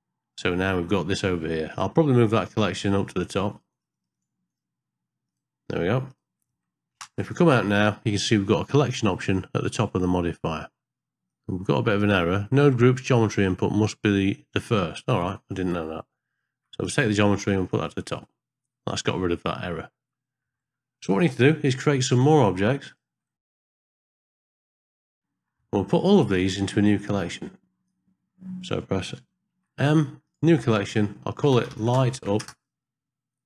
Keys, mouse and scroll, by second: 1.7 click, 3.1 click, 3.7 click, 3.9 click, 4.2 click, 4.5 click, 5.3 click, 6.1 click, 7.1 ctrl+space, 11.4 click, 16.8 click, 17.8 click, 22.9 click, 23.4-25.0 typing, 25.6 ctrl+shift+d, 25.6 ctrl+middle click, 27.0-27.9 drag, 29.5 m.